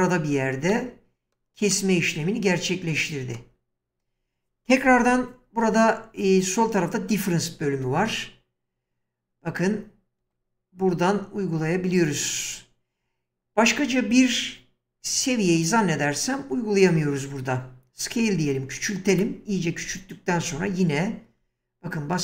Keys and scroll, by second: 4.9 1, 7.8 space, 18.2 s, 20.4 space.